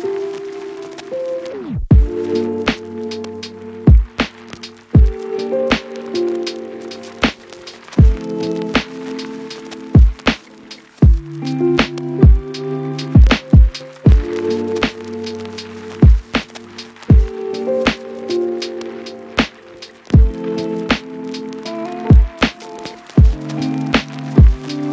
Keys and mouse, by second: 0.1 Left, 0.1 Right, 0.2 Right, 1.1 ctrl+F2, 1.3 Left, 1.8 F1, 1.9 F2, 2.2 Left, 2.9 F2, 3.1 Left, 3.7 F1, 3.7 F2, 3.9 Left, 4.6 F2, 4.8 Left, 5.6 click, 5.8 a, 6.8 m, 11.0 a, 11.1 shift+middle click, 13.1 KP_Divide, 14.1-17.3 shift+middle drag, 17.6 a, 17.8-18.8 middle drag.